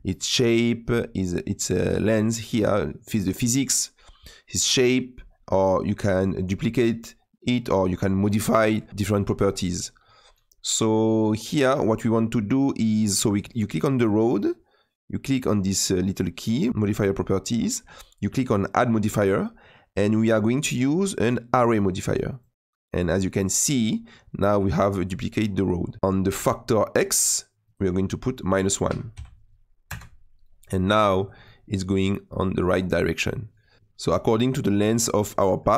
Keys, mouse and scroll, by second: 12.6 click, 13.5 click, 23.9-26.0 scroll down 2, 26.0-29.9 middle drag, 29.9-31.4 drag, 31.4-35.7 middle drag.